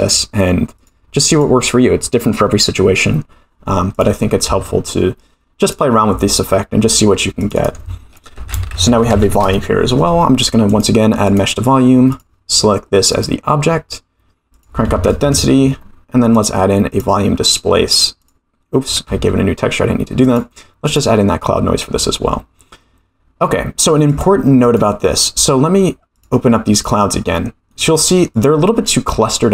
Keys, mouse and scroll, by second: 0.7-1.6 drag, 3.9 click, 4.4 shift+a, 7.4 click, 7.6-10.0 drag, 10.7-11.4 drag, 12.1 click, 14.5-15.7 drag, 16.3-17.1 drag, 18.2 click, 19.3 ctrl+z, 20.2 click, 24.0 click, 24.6 click, 26.1 click, 26.7 click, 27.7-28.0 middle drag, 28.3 click, 28.8-29.4 scroll up 3, 29.4-29.5 scroll up 1.